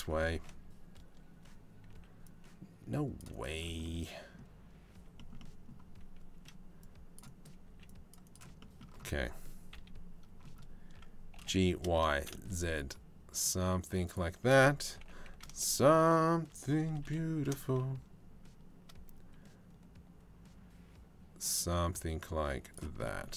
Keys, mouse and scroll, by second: 0.0 1, 1.5 c, 5.0 click, 5.9 c, 7.3 c, 9.3 KP_3, 11.0 g, 14.6 g.